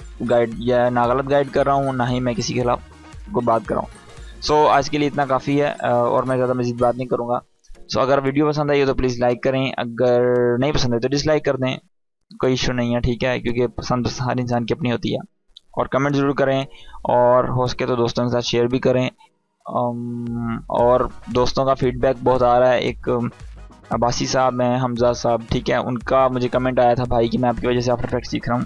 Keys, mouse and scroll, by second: 21.3-21.9 drag.